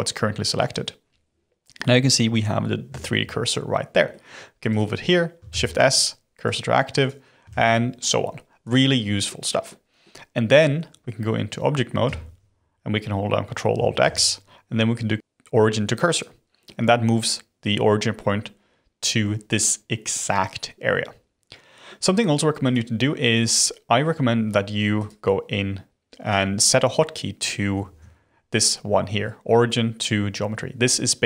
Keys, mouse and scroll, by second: 1.7-4.6 middle drag, 4.6 click, 5.4 shift+s, 7.0 click, 7.4 shift+s, 9.6-12.0 middle drag, 12.0 Tab, 14.0 ctrl+alt+x, 16.6-21.1 middle drag, 21.1-22.6 scroll down 1, 22.6 click, 24.9 click, 27.8 ctrl+alt+x.